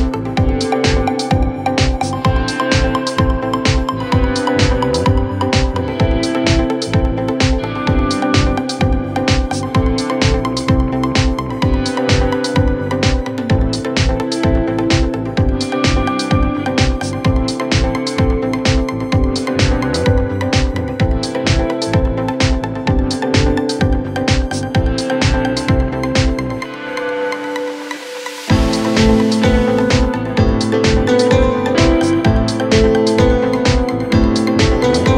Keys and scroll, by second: 8.1 F3, 8.5 Escape, 9.5 shift+F2, 9.8 Escape, 16.1 g.